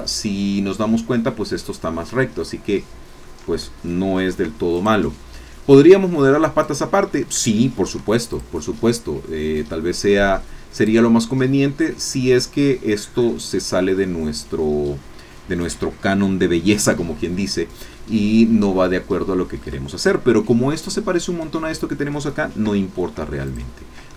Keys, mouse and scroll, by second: 2.2-3.4 drag, 4.2 ctrl+r, 4.8 ctrl+click, 6.6 click, 7.9 ctrl+r, 8.4 ctrl+click, 10.7 click, 11.7-12.8 drag, 17.9-20.4 drag, 22.6 3, 23.4 click.